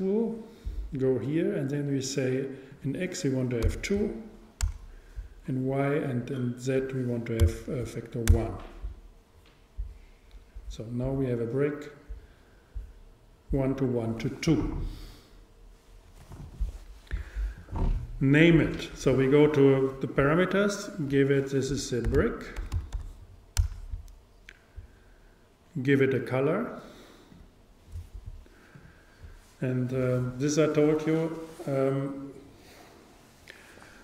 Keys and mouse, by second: 2.8-4.6 drag, 6.1-7.9 drag, 19.8-22.9 drag, 25.9-30.6 drag.